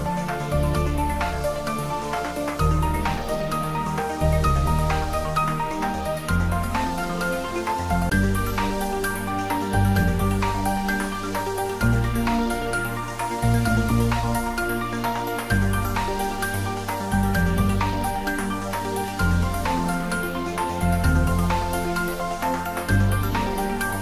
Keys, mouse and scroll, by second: 0.8 scroll down 1, 1.3 middle click, 2.4 click, 3.3 Tab, 3.8 scroll down 1, 4.2-6.8 middle drag, 6.8 Tab, 7.1 scroll up 1, 7.9-11.9 middle drag, 12.5-15.9 middle drag, 16.5 middle click, 17.1 ctrl+r, 19.1 click.